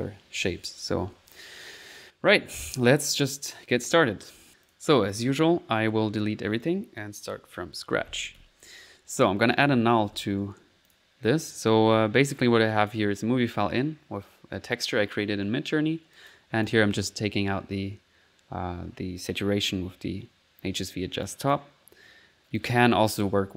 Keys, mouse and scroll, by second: 0.0-0.9 typing, 2.3-3.3 middle drag, 3.3 middle click, 3.7 click, 4.2 click, 4.6 click, 6.6 right click, 7.7 right click, 8.5 Delete, 9.5 right click, 9.8-10.6 typing, 10.9 click, 11.4 click, 11.8 middle click, 12.3 click, 12.7 click, 15.7 middle click, 16.1 click, 16.7 click, 16.9 click, 17.2 middle click, 20.6-21.2 scroll up 1, 21.2 click, 22.5 click.